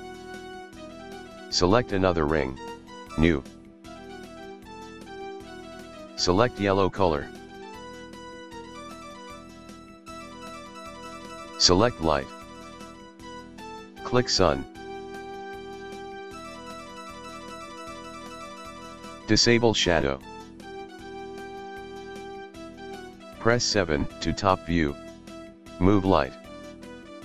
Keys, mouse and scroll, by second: 1.4 click, 3.2-5.0 drag, 9.9 click, 11.7 click, 14.1 click, 19.4 click, 22.6 KP_1, 23.2 KP_7, 25.7 g.